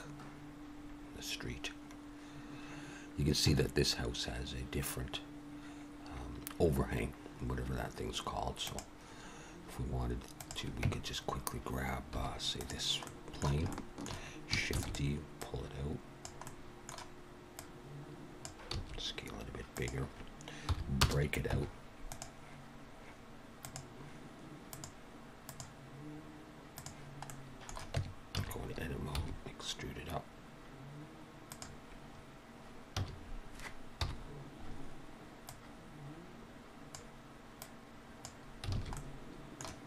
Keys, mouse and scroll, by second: 10.2 click, 10.8 Tab, 12.0 3, 12.5 click, 12.9 middle click, 13.6 shift+middle click, 14.6 shift+d, 15.3 click, 16.4 middle click, 17.5 click, 18.6 s, 20.6 p, 21.4 Tab, 22.0 click, 23.5 click, 24.6 click, 27.2 middle click, 27.8 Tab, 28.2 a, 29.1 e, 33.1 a, 33.9 KP_1, 35.4 click, 37.5 click, 38.6 alt+a, 38.9 middle click.